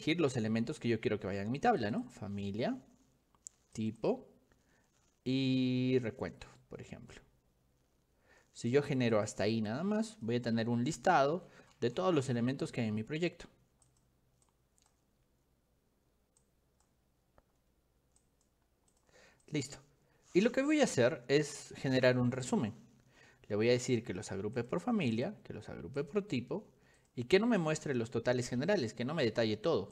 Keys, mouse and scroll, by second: 1.9 click, 3.8 click, 9.2 click, 10.2 click, 14.5 click, 16.5 click, 18.3 click, 19.0 click, 19.5 click, 22.5 click, 23.9 click, 25.2 click, 26.1 click, 27.0 click.